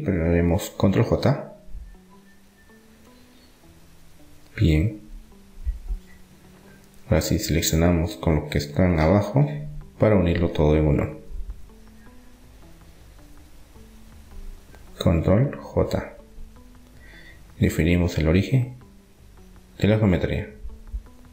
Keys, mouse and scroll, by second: 0.9 ctrl+j, 2.7 Tab, 3.9-5.4 drag, 5.4 Tab, 5.4 middle click, 9.3-13.3 middle drag, 14.4-16.3 right drag, 16.3 ctrl+j, 18.3-20.7 drag.